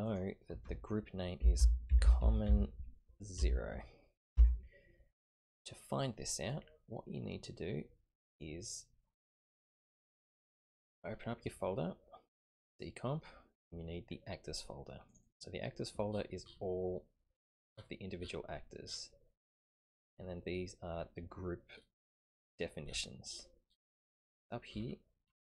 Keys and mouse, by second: 0.0-5.5 drag, 2.0 m.